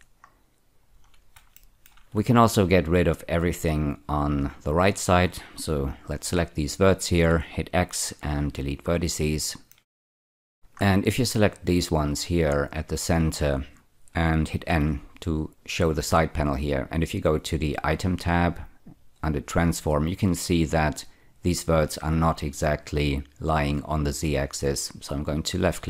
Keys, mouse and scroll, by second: 0.3-0.8 scroll down 1, 0.8 scroll down 2, 1.5 shift+middle click, 3.1 click, 8.0 x, 8.7 click, 9.6 shift+middle click, 10.0 shift+middle click, 10.6 scroll up 2, 11.4-13.0 drag, 14.6 n, 25.4 click.